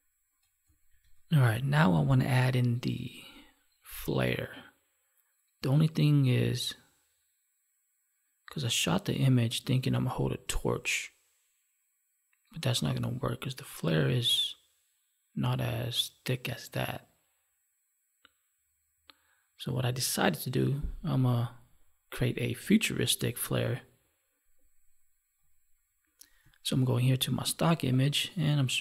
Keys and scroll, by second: 0.8 ctrl+1, 26.7 alt+Tab.